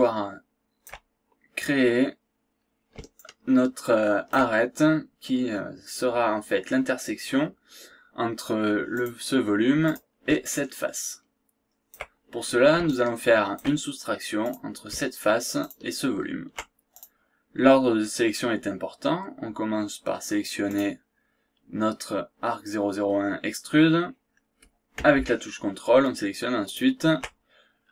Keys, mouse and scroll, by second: 3.2-4.5 shift+right drag, 8.9 click, 9.8 click, 10.4-12.1 shift+right drag, 12.2 shift+scroll down 1, 12.5 scroll up 1, 12.9 shift+right click, 14.4 click, 15.6 ctrl+click, 17.0 ctrl+click, 20.7 click, 26.6 ctrl+click.